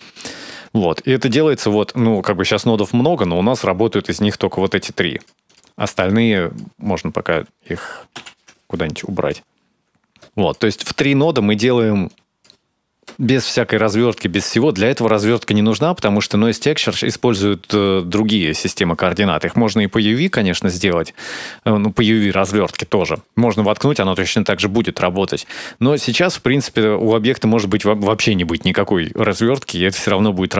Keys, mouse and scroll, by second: 0.0 shift+middle click, 0.5 middle click, 1.5-2.4 scroll down 8, 2.4 click, 4.0 click, 4.3 shift+click, 4.4 shift+click, 4.8 g, 5.3 scroll down 6, 5.9 click, 8.0 ctrl+j, 8.7 click, 9.1 middle click, 9.3 click, 9.6 middle click, 9.7-10.1 scroll up 5, 9.9 middle click, 10.1 click, 10.8 click, 11.9 click, 12.4-13.0 scroll up 4, 13.7 shift+middle click, 14.2-14.5 scroll down 4, 15.3-15.9 scroll up 2, 15.9 click, 16.3 click, 17.6 middle click, 20.4 middle click, 22.8 middle click, 23.5 shift+a, 28.9 middle click, 30.0 middle click.